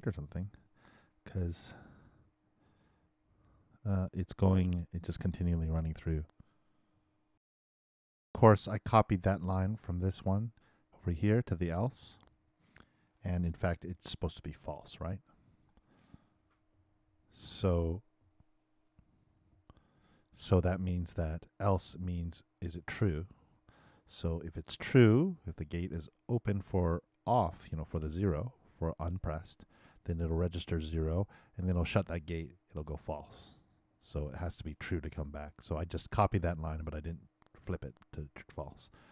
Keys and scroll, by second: 7.3 alt+shift+i, 13.3 shift+BackSpace, 16.1-17.6 typing, 19.2 shift+f.